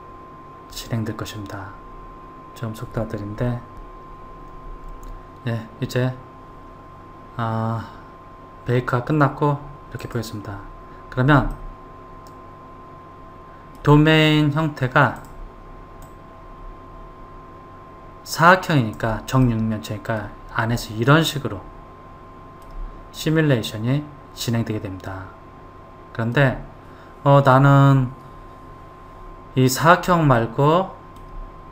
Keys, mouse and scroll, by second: 10.2 click, 11.8-14.8 middle drag, 15.4 drag, 16.2-19.3 drag, 19.6-26.5 middle drag, 30.6-31.7 middle drag.